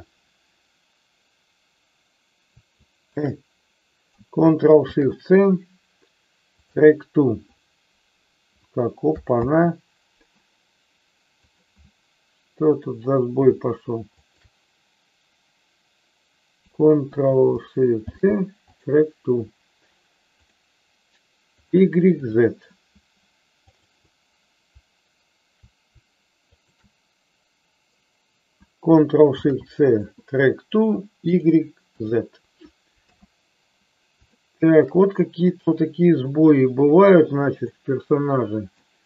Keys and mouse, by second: 2.9 shift+click, 9.5 ctrl+z, 14.2-15.6 shift+drag, 17.9 ctrl+shift+c, 21.7 click, 22.3 click, 23.7-25.3 drag, 26.5-27.9 shift+drag, 29.3 ctrl+shift+c, 31.4 click, 32.0 click, 33.0 KP_3, 34.4 shift+middle click, 35.5 click, 37.6-38.9 middle drag.